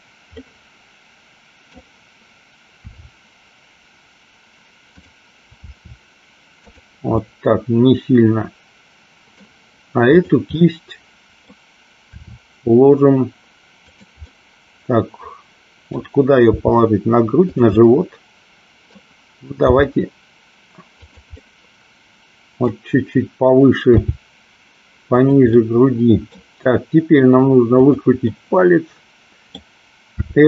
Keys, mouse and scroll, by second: 0.4-1.8 middle drag, 2.8 r, 5.7 r, 6.7 click, 7.3-9.3 middle drag, 10.2 click, 10.7 middle click, 12.2 r, 13.9 click, 14.3-15.9 middle drag, 16.6 r, 17.6 click, 17.8-19.1 middle drag, 19.8 g, 21.0 click, 21.6-22.7 middle drag, 24.0 g, 25.6 middle click, 28.0-28.3 drag, 28.4-29.7 middle drag, 30.2 r.